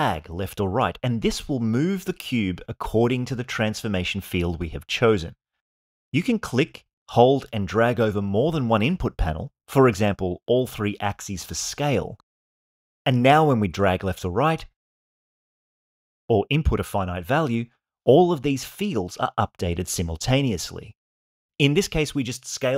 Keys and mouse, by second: 7.7-18.9 drag.